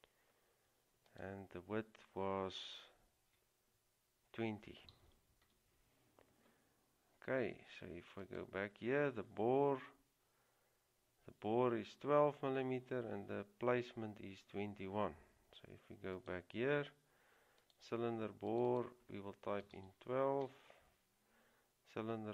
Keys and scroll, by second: 5.0 typing, 7.5 typing, 19.7 typing.